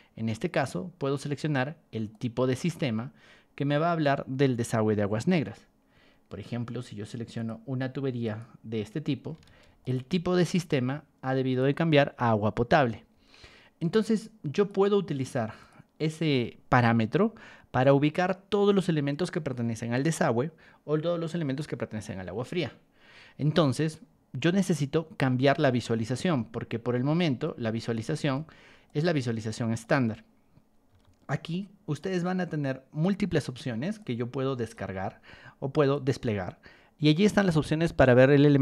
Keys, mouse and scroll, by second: 0.5 click, 2.1 click, 5.4 Escape, 6.3 Escape, 6.6 middle click, 7.3 click, 8.2 click, 9.4 ctrl+1, 9.8 click, 10.5 ctrl+click, 11.5 click, 13.1 Escape, 14.5 click, 15.6 click, 24.1 middle click, 24.1 scroll up 2, 24.4 middle click, 25.4 ctrl+1, 27.8 click, 28.8 ctrl+click, 30.9 r, 32.0-33.0 drag, 34.0 ctrl+shift+click, 35.0 Escape, 35.9 click.